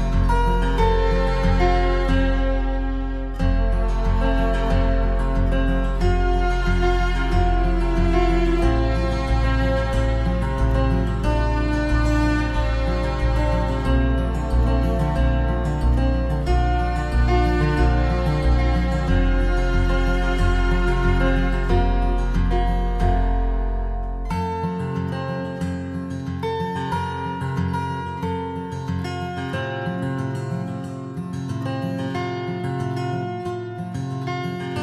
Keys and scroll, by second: 6.9 ctrl+-, 15.4 ctrl+=, 21.7 ctrl+z, 23.5 ctrl+z.